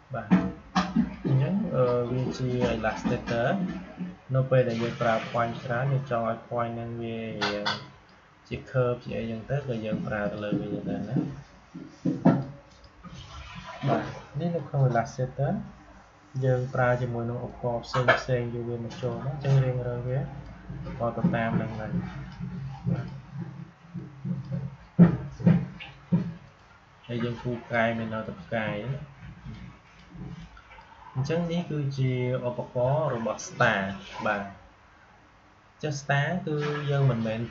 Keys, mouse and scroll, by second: 36.9-37.5 drag.